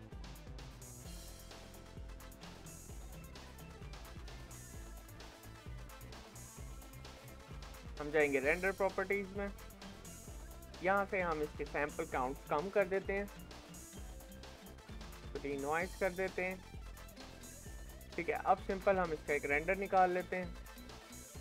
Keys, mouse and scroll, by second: 20.3-21.4 drag.